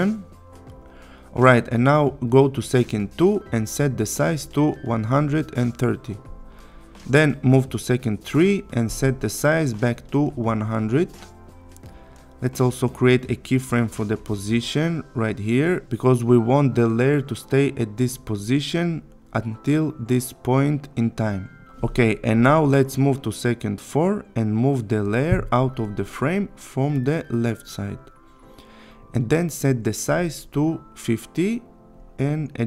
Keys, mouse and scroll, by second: 0.6-1.9 click, 2.0-3.2 click, 6.8-8.4 click, 10.0 click, 11.3 Return, 13.8 click, 23.5-24.7 click, 30.8 click, 32.0 Return.